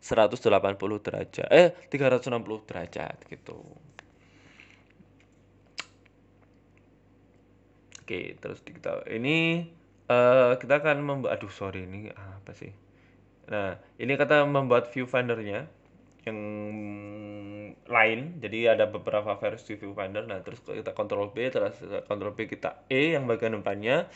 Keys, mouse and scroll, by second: 0.0 shift+a, 1.3 shift+s, 2.2 shift+s, 6.1 shift+middle click, 6.7 shift+middle click, 6.7 g, 7.0-7.6 scroll up 3, 7.3 shift+middle click, 7.6 s, 8.8 shift+middle click, 9.6 Tab, 10.5 click, 11.0 ctrl+z, 11.6 click, 11.8 click, 12.5 s, 13.9 click, 14.5 shift+click, 15.2 ctrl+b, 18.5 click, 19.2 right click, 19.6 right click, 20.1 e, 20.5 s, 22.9 e.